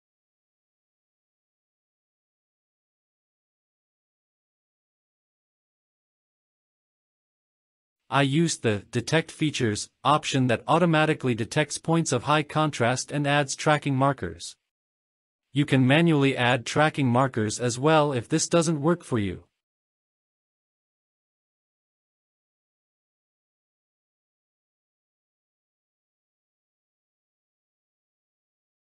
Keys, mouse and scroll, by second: 0.8-2.2 drag, 2.5 space, 4.0-4.7 drag, 4.8 space, 5.1 space, 5.2 drag, 5.4-5.8 space, 5.8-6.1 drag, 6.2 space, 7.2 click, 7.3 click, 12.0 click, 12.8-14.9 drag, 16.0 click, 18.8 ctrl+z, 20.7 click, 21.3-23.9 drag, 26.0 click, 28.3 click.